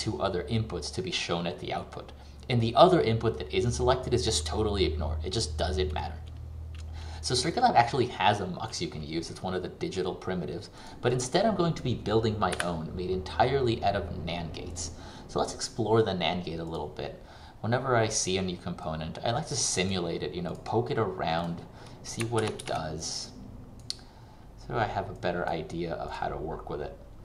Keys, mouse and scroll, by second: 12.7 Delete, 16.7 click, 22.5 ctrl+c, 22.7 ctrl+v, 23.1 click.